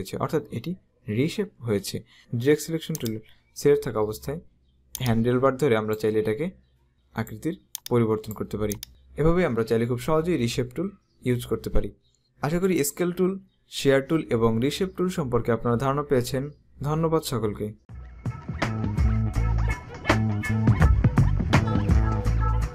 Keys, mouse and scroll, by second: 2.2 click, 3.1 click, 5.1 click, 12.7 right click.